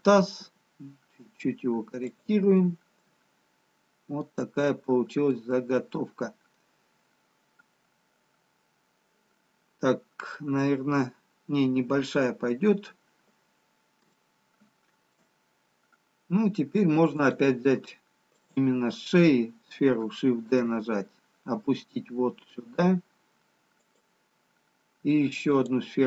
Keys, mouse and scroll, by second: 3.0 g, 4.7 scroll down 1, 6.2 middle click, 14.1 shift+middle click, 18.8 click, 20.4 shift+d, 25.5 click.